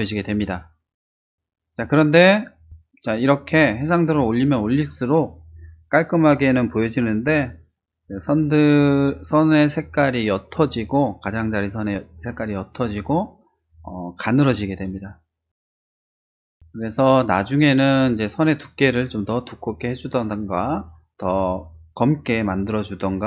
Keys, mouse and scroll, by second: 1.9 space, 2.1 click, 2.6-3.8 drag.